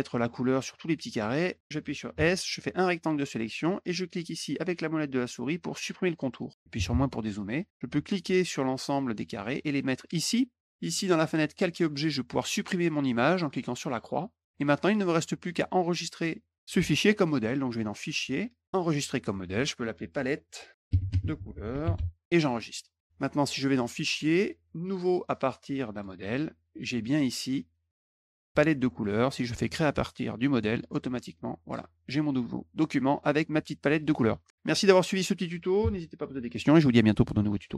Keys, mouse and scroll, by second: 2.0 s, 2.4-3.4 drag, 5.7 middle click, 8.1-10.0 drag, 11.4 click, 12.5 click, 13.6 click, 14.2 click, 15.2 middle click, 15.5 middle click, 15.9 middle click, 17.7 click, 20.0-22.2 typing, 22.7 click, 23.6 click, 25.7 click, 28.1 scroll down 1, 30.4 click, 37.7 Tab.